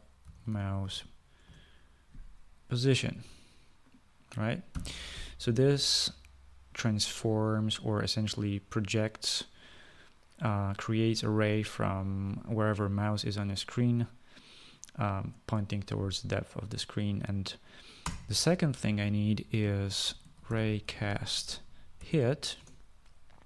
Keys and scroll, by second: 0.0-1.8 typing, 5.0 ;, 18.3 Return, 20.1-22.9 typing.